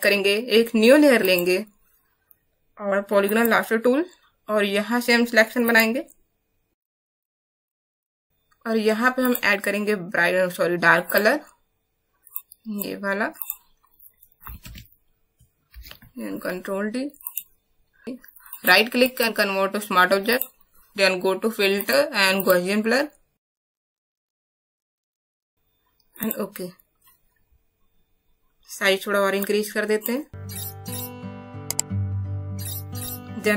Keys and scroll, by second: 14.6 alt+BackSpace.